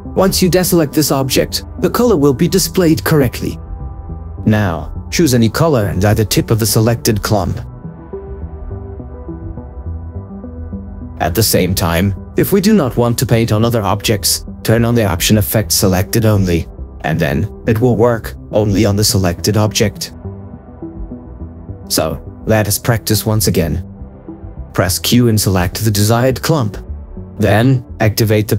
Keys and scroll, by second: 12.4 ctrl+z, 24.5 o.